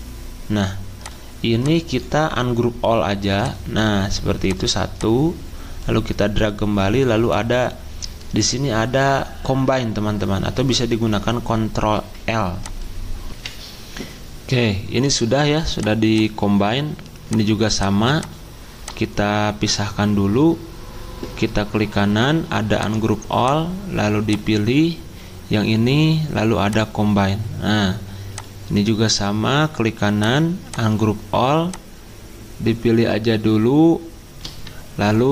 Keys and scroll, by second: 13.3 F10.